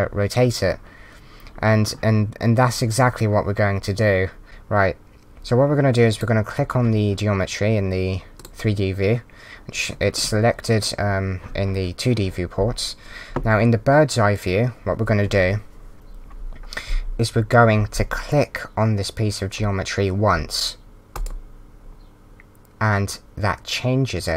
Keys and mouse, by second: 6.1 click, 8.3 click.